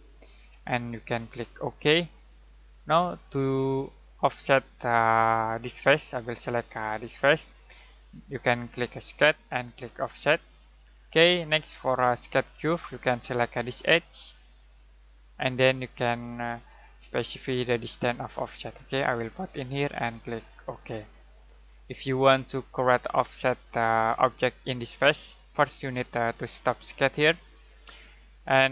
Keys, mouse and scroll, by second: 0.6 shift+middle click, 1.9 click, 3.2 middle click, 6.9 click, 16.0 click, 22.2 middle click, 24.0 middle click, 27.3 click.